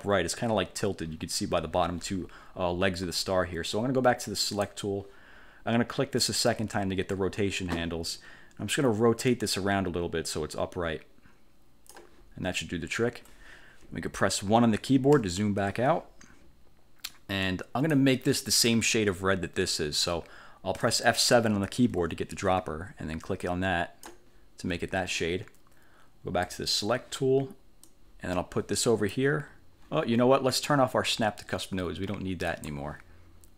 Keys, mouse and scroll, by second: 4.6 click, 6.3 click, 9.4-12.2 drag, 15.3 1, 17.5 click, 22.0 F7, 23.5 click, 26.5 click, 27.9-29.4 drag, 32.6 click.